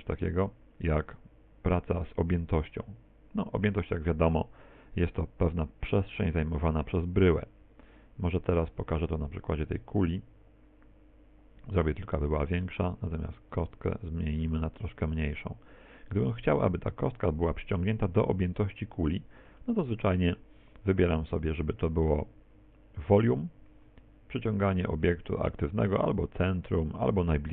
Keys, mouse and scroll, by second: 0.5 click, 7.7 x, 8.5 right click, 9.4 right click, 10.1 click, 11.7 right click, 12.1 s, 13.2 click, 13.5 right click, 14.5 s, 15.6 click, 19.1 middle click, 19.9 middle click, 21.5 click, 24.4 click.